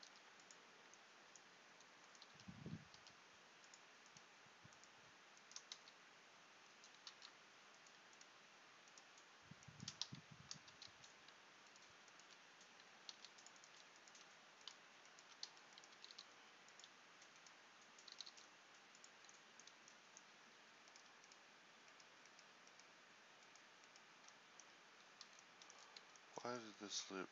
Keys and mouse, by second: 7.2 ctrl+z, 9.9 click, 11.0 f, 13.2 ctrl+r, 15.6 f, 16.0 g, 18.2 g.